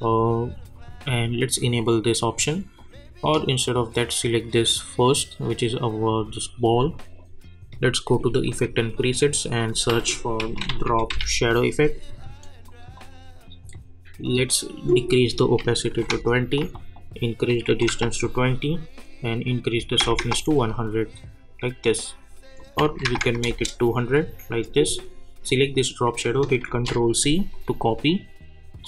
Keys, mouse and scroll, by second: 1.8 click, 9.6 click, 9.9 ctrl+a, 10.1-11.6 typing, 12.7 click, 17.2 click, 23.4 Return, 24.7 click, 26.6 ctrl+c, 27.5 click.